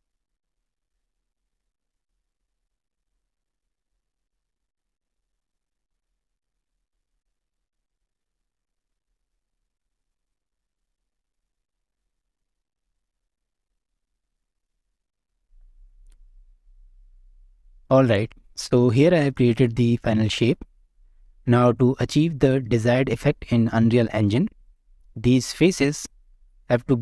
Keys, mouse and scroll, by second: 0.2 n, 0.3 click, 0.3 scroll up 1, 0.4 shift+middle click, 0.5 click, 0.7 middle drag, 0.9 scroll down 1, 0.9 middle click, 1.3-6.7 typing, 1.6 shift+middle click, 1.7 scroll up 1, 1.7 middle click, 2.1 middle click, 2.5 scroll up 1, 2.6 shift+middle click, 3.6 middle click, 3.8 middle click, 4.7 middle click, 5.2 middle click, 5.5 middle click, 5.7 middle drag, 6.2 middle click, 6.8 Escape, 6.9 middle click, 7.1 scroll down 1, 7.1 shift+middle click, 7.2 scroll up 1, 7.2 middle click, 7.4 shift+middle click, 7.8 g, 8.0 scroll down 1, 8.1 middle click, 8.3 click, 8.3 middle drag, 8.5 click, 8.5 shift+middle click, 8.9-14.6 typing, 9.1 middle click, 9.2 scroll down 1, 9.3 shift+middle click, 10.0 middle click, 11.2 click, 11.2 middle click, 11.3 click, 11.7 middle click, 11.9 shift+middle click, 12.3 middle click, 12.7 middle click, 12.9 scroll down 1, 12.9 shift+middle click, 13.4 shift+middle click, 13.5 click, 14.3 drag, 14.4 middle click, 14.8 shift+middle click, 14.8 scroll down 1, 15.0 scroll up 1, 15.1 click, 18.6-19.1 middle drag, 19.4 shift+middle click, 20.4 shift+middle drag, 20.7 scroll up 1, 21.2-21.5 middle drag, 22.1-22.6 scroll up 2, 22.6 shift+middle click, 24.6 click, 25.2 Tab, 25.6 middle click, 26.5-27.0 scroll up 1.